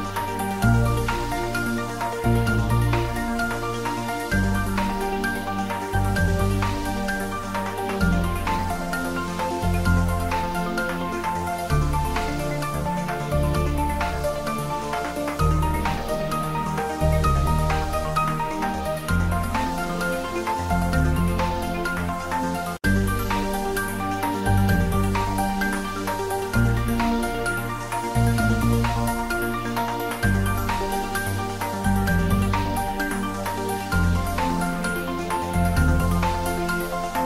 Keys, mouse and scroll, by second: 0.0-0.8 scroll up 1, 0.8 click, 1.3 s, 1.3 z, 3.3 click, 3.8 middle click, 4.0 Tab, 4.4 ctrl+r, 4.5 scroll up 1, 5.2 click, 5.8 ctrl+r, 5.9 scroll up 1, 6.8 click, 7.6 ctrl+r, 8.1 click, 8.7 s, 10.4 click, 14.5 Tab, 15.3 click, 15.5 Tab, 16.2 click, 18.7 click, 21.7 click, 24.3-25.5 scroll down 1, 25.5 click, 25.7-26.2 scroll down 1, 26.2 click, 27.2 3, 27.4 Return, 27.8-28.2 scroll down 1, 29.0 click, 29.3 scroll down 1, 29.6 click, 29.9-30.9 scroll down 1, 31.2 click, 31.9 space, 34.1 space, 34.6 click, 36.7 click.